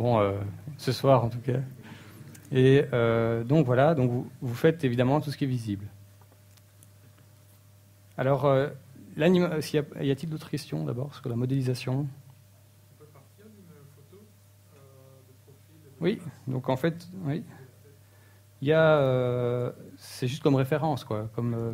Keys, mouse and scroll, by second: 13.6-16.2 typing.